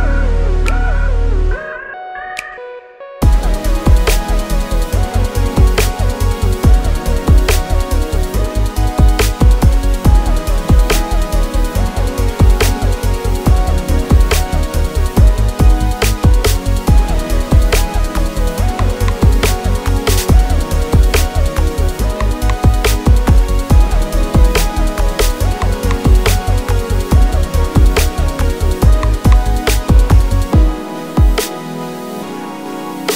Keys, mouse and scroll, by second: 0.0 shift+s, 0.7 3, 0.8 click, 1.0 shift+click, 1.6 click, 1.9 ctrl+click, 2.2 KP_3, 3.2 r, 3.9 KP_Enter, 4.5 Tab, 4.7 ctrl+s, 5.0 click, 5.2 click, 5.5-6.0 drag, 6.2 Tab, 6.4-7.4 middle drag, 7.4 click, 7.7-11.7 middle drag, 8.9-10.1 scroll down 4, 11.1 Tab, 11.7-12.9 drag, 13.3-14.4 drag, 14.4-16.1 middle drag, 15.4-15.9 scroll down 2, 15.9 scroll down 1, 16.1 click, 16.5-17.8 drag, 17.2 KP_0, 17.4 KP_Enter, 17.8-20.0 middle drag, 18.6 scroll down 2, 20.0 drag, 20.2 drag, 20.4 KP_3, 20.7-21.1 scroll down 1, 21.1 g, 22.1 click, 22.4-28.4 middle drag, 26.1 KP_3, 26.5 shift+a, 27.5 Tab, 28.4 click, 28.5 s, 29.4 click, 29.6 KP_7, 29.8 z, 30.0 scroll up 2, 30.3-32.0 shift+middle drag, 31.5 s, 32.0 click, 32.1-32.5 scroll down 2, 32.5 z.